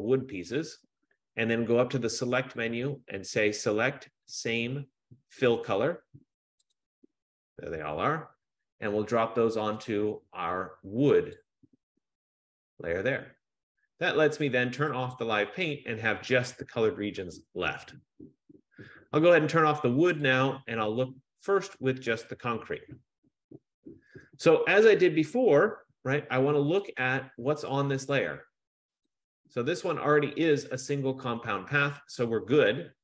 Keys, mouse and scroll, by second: 2.8 click, 6.9 click, 11.5 click, 15.4 click, 16.6 click, 20.4 click, 27.2 click, 29.2 click.